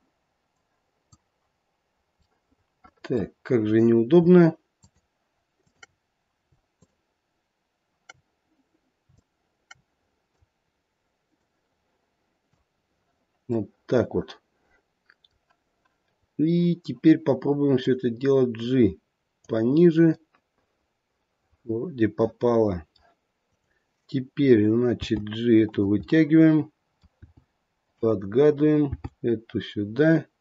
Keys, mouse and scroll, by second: 0.4 click, 2.3 middle click, 2.4 middle click, 4.7 shift+click, 5.5 shift+click, 6.7 shift+click, 9.1 shift+click, 11.3 click, 13.5 middle click, 14.3 middle click, 17.8 click, 20.2 middle click, 21.3 middle click, 22.2 middle click, 22.4 middle click, 22.6 middle click, 23.4 click, 24.9 g, 26.0 middle click, 27.1 g, 28.6 click, 28.9 g.